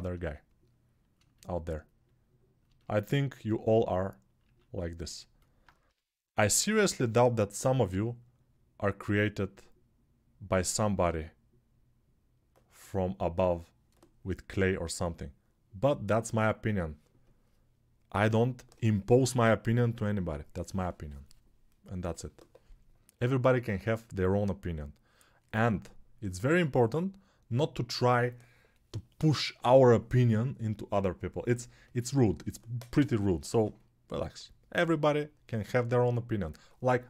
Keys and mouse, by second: 4.7 alt+q.